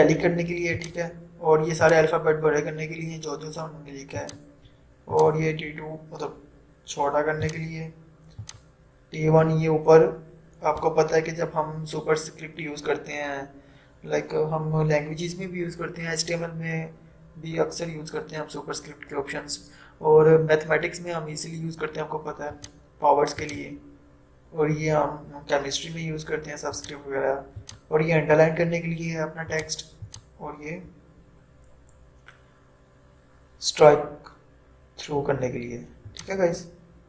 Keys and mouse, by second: 4.2 click, 22.6 click, 26.9 click, 30.1 typing, 36.2 click.